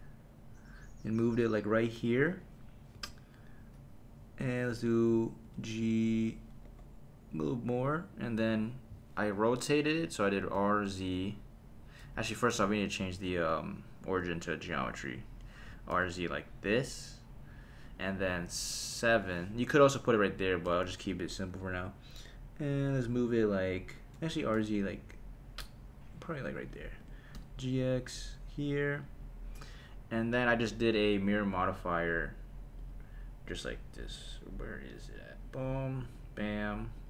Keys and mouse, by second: 2.2 click, 2.9 KP_3, 5.4 g, 6.6 y, 7.8 click, 10.5 r, 11.0 z, 12.1 Escape, 13.1 click, 13.8-14.9 drag, 15.6 r, 15.9 z, 17.8 click, 19.1 KP_7, 20.6 g, 21.5 x, 23.9 click, 24.3 r, 24.6 z, 26.7 click, 27.0 g, 27.3 x, 29.0 click, 32.8-35.3 drag, 36.1 click.